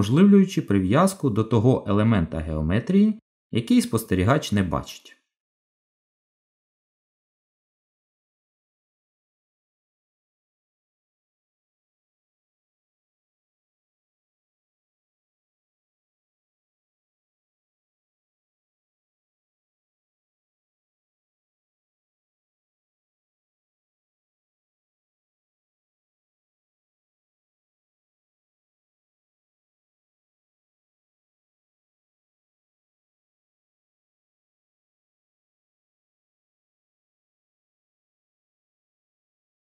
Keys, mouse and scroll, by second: 17.3 middle click, 22.4 g, 36.8 middle click, 39.3 middle click.